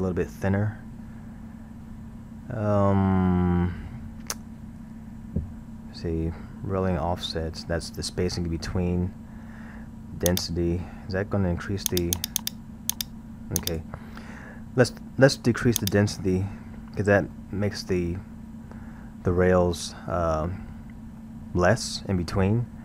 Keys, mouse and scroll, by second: 10.3 click, 11.9-14.5 drag, 15.8 click, 17.4-20.4 middle drag, 21.2-22.8 middle drag.